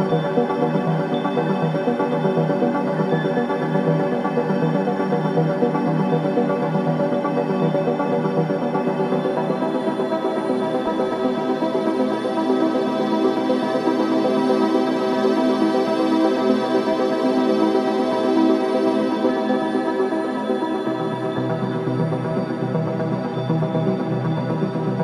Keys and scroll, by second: 3.0 1, 7.9 4, 9.3 3, 9.6 ], 12.9 ], 14.5 ctrl+z, 15.4 4, 22.7 3.